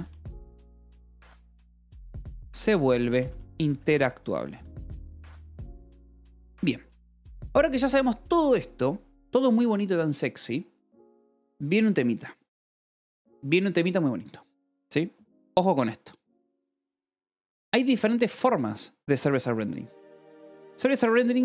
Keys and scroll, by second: 0.0-5.5 typing, 5.7 Escape, 7.4 ctrl+s, 17.0 Return.